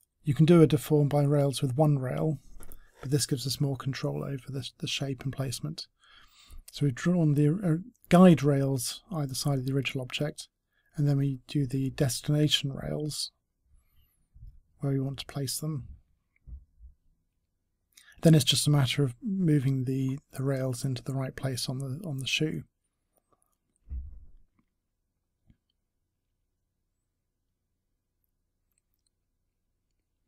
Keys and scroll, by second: 23.2 w.